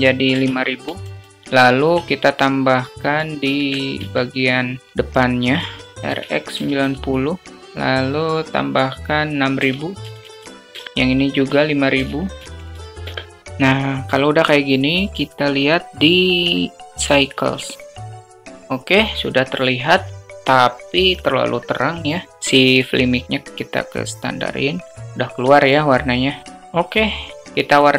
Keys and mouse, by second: 0.8 0, 1.5 alt+middle click, 2.5 click, 3.5 shift+d, 5.6 alt+middle click, 6.0 r, 7.6-10.7 drag, 10.0 0, 11.3-13.0 drag, 12.3 0, 12.6 0, 13.4 KP_0, 16.3-18.2 drag, 22.4 click, 25.8 middle click.